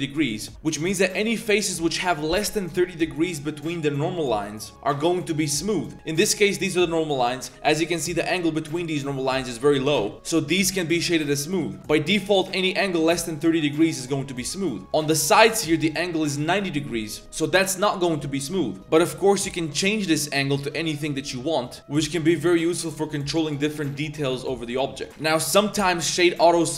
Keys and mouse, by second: 0.4 click, 0.7 click, 1.1 shift+click, 5.2 middle click, 5.6 middle click, 7.6 middle click, 9.4 middle click, 9.8 middle click, 10.1 shift+drag, 10.1 Tab, 10.5 drag, 10.9 shift+drag, 11.7 Tab, 14.3 click, 14.6-14.9 drag, 14.8 3, 14.9 middle click, 15.1 shift+middle click, 15.5 click, 15.8 shift+click, 18.8 Tab, 19.8-24.0 drag, 24.4-24.7 drag, 24.8 shift+middle drag, 25.2-26.6 drag.